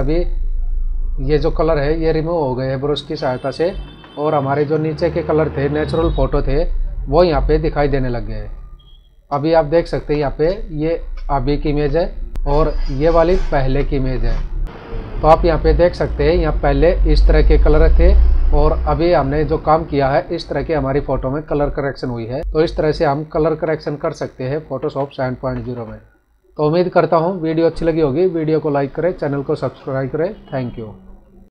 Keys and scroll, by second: 3.8 ctrl+-, 8.5 space, 9.7 ctrl+=, 10.4 space, 11.4 ctrl+-, 12.3 ctrl+e, 13.8 ctrl+=, 23.4 ctrl+=, 24.6 ctrl+-.